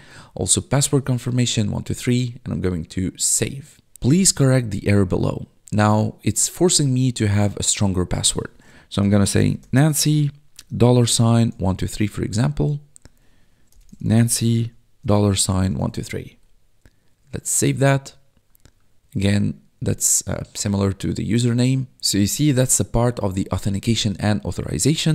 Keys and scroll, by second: 0.5-1.5 typing, 8.7-12.3 typing, 13.4-16.4 typing.